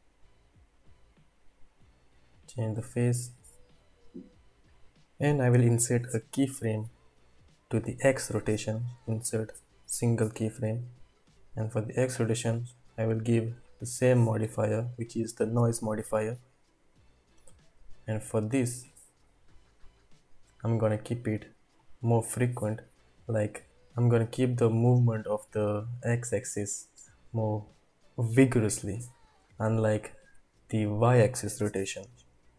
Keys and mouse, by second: 1.8-3.8 drag, 4.6 click, 8.1-11.0 drag, 14.5-16.2 drag, 18.7-21.9 drag, 31.8 space.